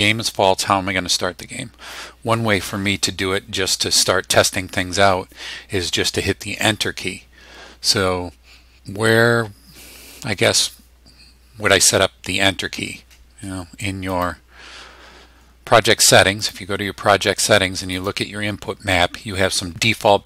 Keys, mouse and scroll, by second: 14.1 click, 16.4 click, 17.9 click.